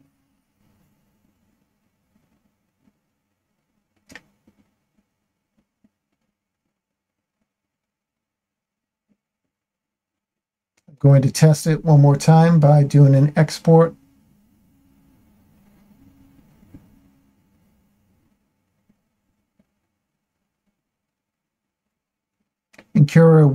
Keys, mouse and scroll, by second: 0.8 a, 3.2 m, 9.1 Tab, 10.3 shift+middle click, 12.6 Tab, 16.9-20.1 drag.